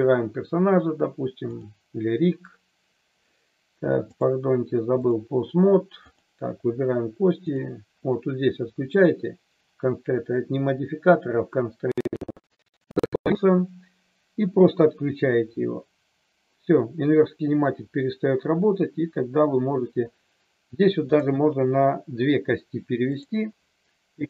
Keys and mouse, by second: 1.5 click, 4.1 click, 6.1 click, 7.5 click, 23.1 click.